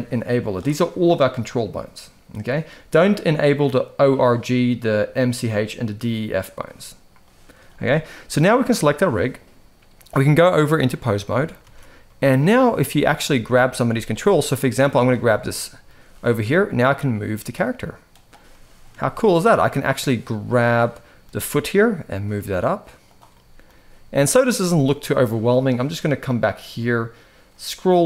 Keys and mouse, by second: 6.9 middle click, 7.4 shift+middle click, 8.3 click, 8.9 click, 9.9-10.6 drag, 11.3 alt+a, 11.7-12.2 middle drag, 12.5 shift+middle drag, 13.0-13.4 middle drag, 13.6 shift+middle drag, 15.0-15.5 middle drag, 15.8 g, 18.2-18.5 middle drag, 18.7 shift+middle drag, 20.0-20.9 middle drag, 21.1 g, 23.0-23.3 middle drag, 23.4 g, 24.6-25.0 middle drag.